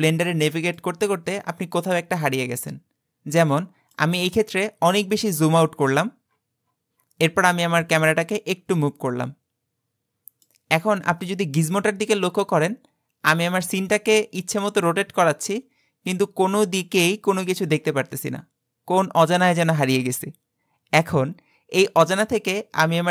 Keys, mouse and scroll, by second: 0.0-1.0 middle drag, 1.0-1.3 scroll down 4, 1.4-4.5 middle drag, 4.5-7.2 scroll down 64, 7.9-11.1 middle drag, 11.7-14.7 middle drag.